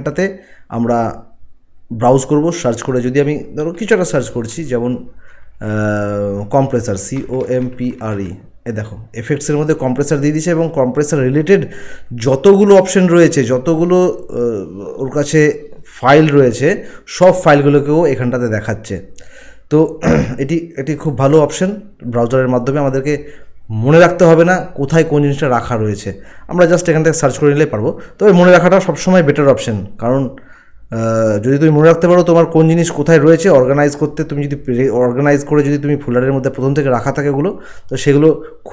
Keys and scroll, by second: 6.9-8.1 typing.